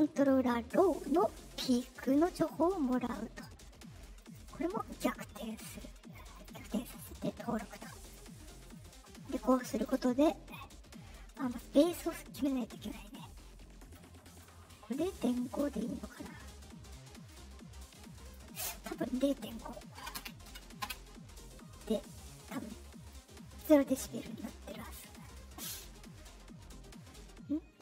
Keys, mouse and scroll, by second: 1.9 click, 4.1 click, 4.8 click, 6.3 click, 8.0 click, 8.6-9.8 drag, 11.3-13.8 drag, 14.2 right click, 17.2-18.2 drag.